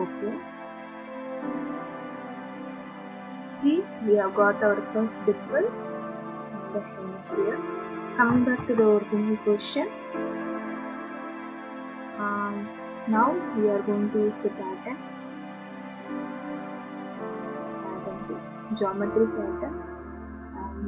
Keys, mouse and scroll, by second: 0.2 click, 4.7 middle click, 8.0 click, 8.3 ctrl+d, 15.1 click, 17.7 click, 18.9 click.